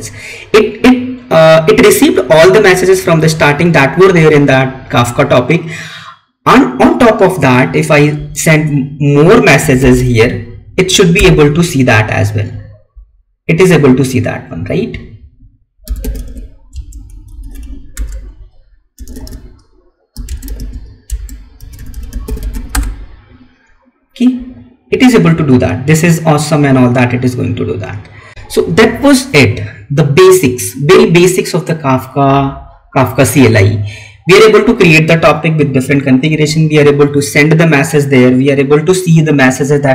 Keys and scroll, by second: 16.6 space, 20.2 space, 21.0 space.